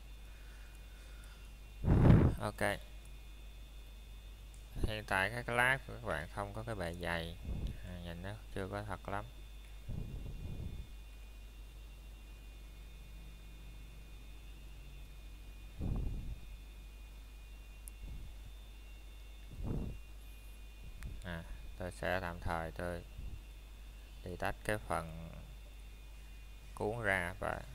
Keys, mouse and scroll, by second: 0.2 scroll up 1, 1.0 middle click, 1.4 shift+middle click, 3.8-4.1 scroll up 1, 4.1 middle click, 4.6 shift+middle click, 5.4-5.9 scroll down 1, 7.5 click, 7.9 middle click, 8.2 scroll up 1, 9.0 Tab, 12.7 click, 13.5-14.0 scroll down 1, 14.0 middle click, 14.6 scroll up 1, 17.6 middle click, 18.1 scroll up 1, 18.8 middle click, 19.4 scroll down 1, 19.7 middle click, 20.1 shift+scroll up 1, 20.7 middle click, 21.0 scroll up 1, 22.0 shift+middle click, 22.4 scroll up 1, 22.9 middle click, 25.9 shift+middle click, 26.7-27.1 scroll down 1, 27.1 middle click.